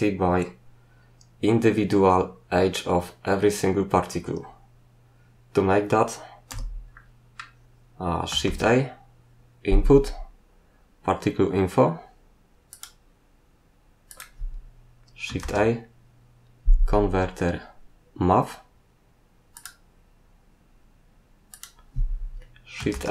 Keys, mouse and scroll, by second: 6.5 n, 6.9 middle click, 8.4 shift+a, 12.7 click, 14.1 click, 15.4 shift+a, 19.5 click, 21.5 click, 22.9 shift+a.